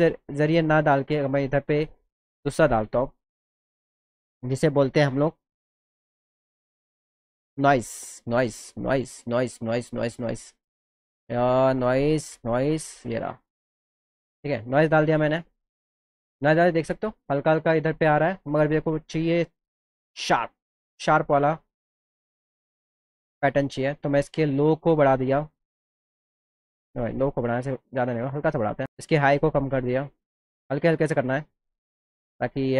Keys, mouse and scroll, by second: 1.7 click, 2.3 click, 5.4 click, 6.6 click, 7.9 click, 12.9 click, 13.5 click, 13.7 click, 20.9-25.1 drag, 27.7 click, 28.5 click, 29.0 click, 29.6 click, 30.6 click, 31.2 click, 31.8 click, 32.3 click, 32.6 click.